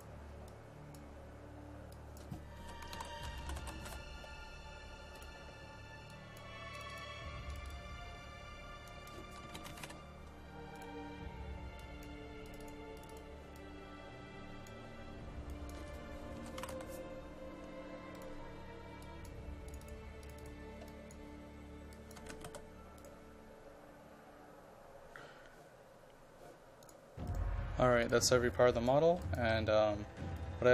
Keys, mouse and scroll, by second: 2.4-4.2 typing, 5.2 click, 9.2-10.3 typing, 10.8-14.7 drag, 16.3-17.3 typing, 18.2 click, 22.1-23.0 typing, 27.3 right click, 28.0 click, 29.2 ctrl+click.